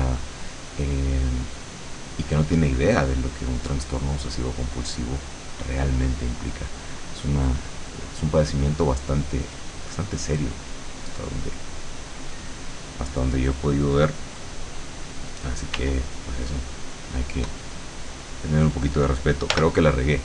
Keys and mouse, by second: 6.7-8.7 drag, 10.6-13.4 middle drag, 15.8 w, 16.7 click, 19.6 l.